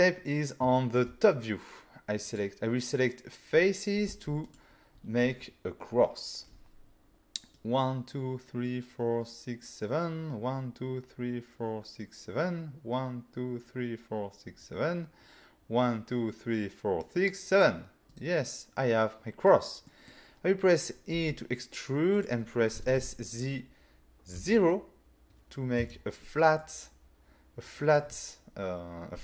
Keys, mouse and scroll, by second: 0.1 scroll down 2, 0.8 shift+middle click, 1.3-2.3 scroll down 1, 2.3 click, 4.1 c, 4.6 click, 5.3 scroll down 1, 7.6 click, 7.6 c, 18.1 right click, 18.5 middle click, 19.9 middle click, 21.2 e, 22.2 click, 22.8 typing, 24.4 0, 25.8 Return, 26.6 middle click.